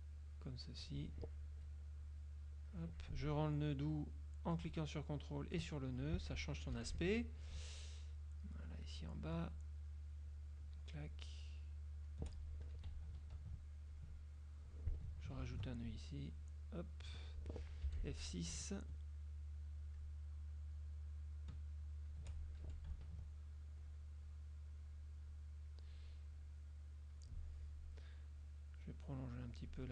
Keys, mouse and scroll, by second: 2.1 click, 5.5 ctrl+click, 6.8 F6, 8.2-9.1 shift+drag, 9.6-10.9 shift+drag, 11.4-12.4 shift+drag, 12.8 F2, 13.2 ctrl+click, 14.0 ctrl+click, 15.6 ctrl+alt+click, 15.9 ctrl+alt+click, 16.4 ctrl+alt+click, 18.0 F6, 19.0-20.3 shift+drag, 20.8-22.4 shift+drag, 22.8 shift+F2, 23.2 ctrl+shift+click, 23.9 click, 25.4 click, 26.4 click, 28.5-29.8 drag.